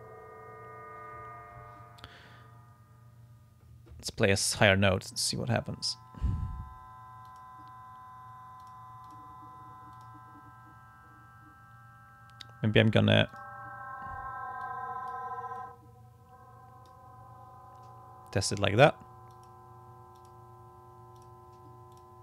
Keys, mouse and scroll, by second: 7.3 click, 8.6 click, 9.1 click, 10.0 click, 13.3 click, 14.6 click, 15.6-17.1 drag, 19.3 click, 20.2 click, 21.2 click, 21.9 click.